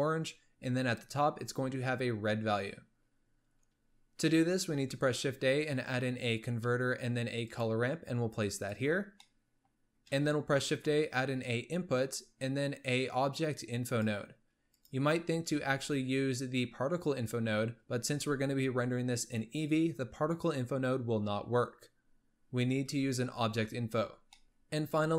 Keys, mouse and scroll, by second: 4.8 shift+a, 9.2 middle click, 10.2 shift+a, 15.6 shift+a, 24.1 scroll up 2, 24.3 middle click, 25.0 shift+a.